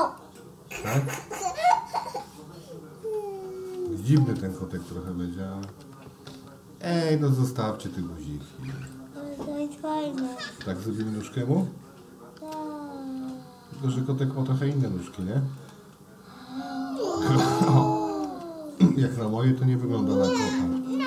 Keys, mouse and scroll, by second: 1.1-3.9 middle drag, 4.2 space, 4.9 click, 5.6 space, 7.2 click, 10.4 g, 12.4 space, 12.4 click, 13.7 g, 15.6-17.0 middle drag, 18.3 space, 19.2 click.